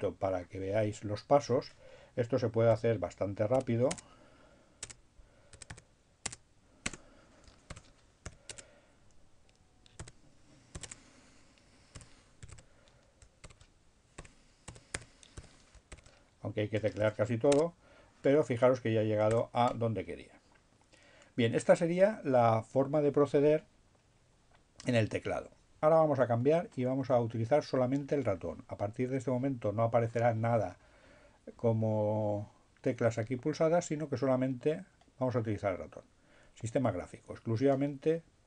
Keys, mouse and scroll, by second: 0.6 l, 1.0 e, 3.9 Tab, 5.0 Tab, 5.5 s, 5.9 Tab, 6.1 space, 7.6 shift+7, 8.0 shift+u, 8.6 Tab, 9.4 s, 9.7 h, 11.0 Tab, 11.5-15.2 typing, 17.1 shift+i, 17.3 shift+Tab, 18.5 Return.